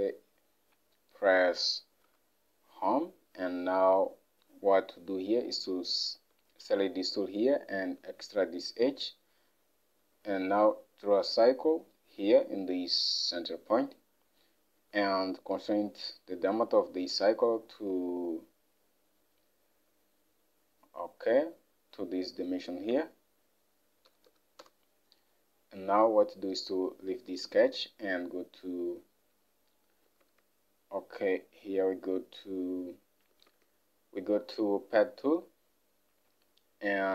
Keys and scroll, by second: 2.1 Home, 17.3 alt+Tab, 24.2 typing, 24.7 Return, 30.3 alt+Tab.